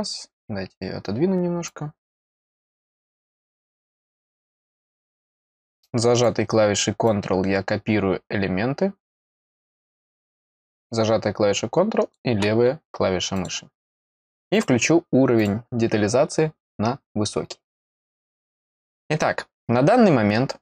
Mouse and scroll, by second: 1.6-2.6 drag, 4.3-6.2 drag, 7.0-9.4 drag, 10.3-12.1 drag, 13.3 click, 14.5 click, 15.3 click, 18.2-18.7 scroll up 1.